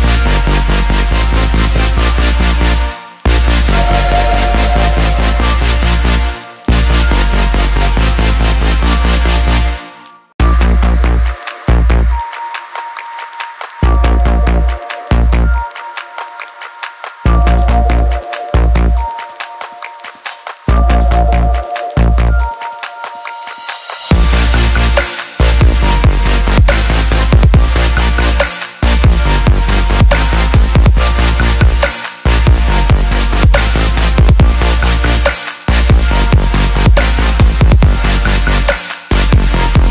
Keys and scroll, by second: 20.9 ctrl+z.